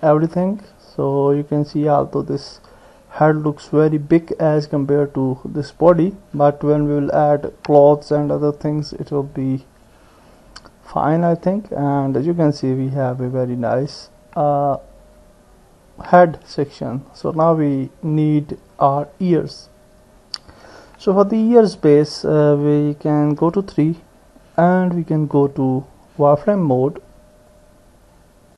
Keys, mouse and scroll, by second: 2.3 click, 4.3 click, 10.0 click, 11.7-19.4 middle drag, 21.5 KP_1, 23.4 KP_3, 26.2 click.